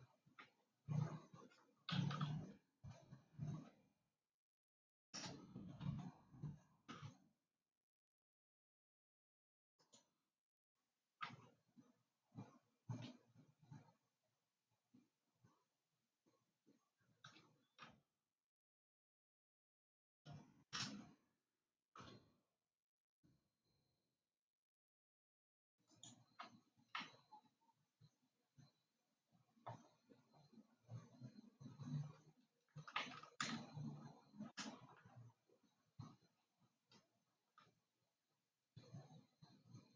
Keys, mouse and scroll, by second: 0.9 e, 6.2 r, 11.8 e, 22.0 r, 27.5-31.2 middle drag, 31.2-32.1 scroll up 4, 32.1-33.6 scroll up 2, 33.6-37.0 shift+middle drag, 38.0 e.